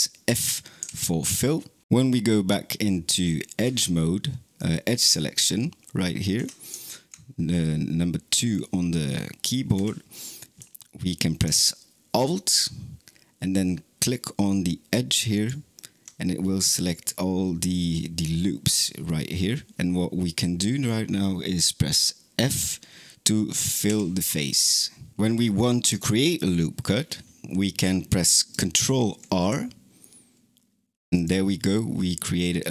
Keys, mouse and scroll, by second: 0.6 f, 3.5 2, 6.2 2, 9.6 2, 15.2 alt+click, 23.7 f, 27.6 click, 28.7 ctrl+r.